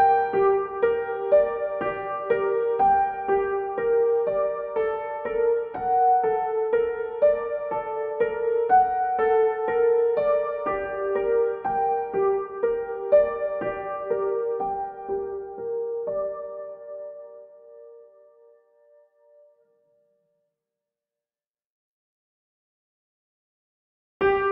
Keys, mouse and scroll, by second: 0.0-2.5 typing, 4.5 click, 4.5 click, 12.0 click, 14.6-20.3 drag, 24.0 click.